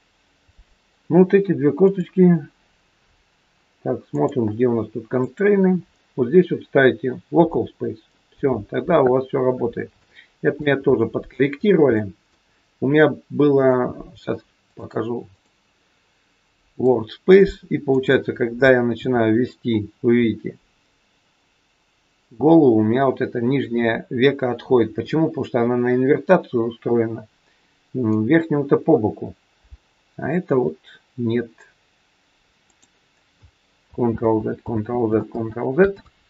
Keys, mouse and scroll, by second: 1.8 click, 4.0 click, 5.1 click, 10.0 shift+middle click, 10.8 scroll up 3, 11.1-11.6 scroll down 2, 11.6 scroll down 1, 11.9 middle click, 13.5 click, 15.4 click, 18.9 r, 34.0 ctrl+z, 34.6 ctrl+z, 35.2 ctrl+z, 35.9 ctrl+z.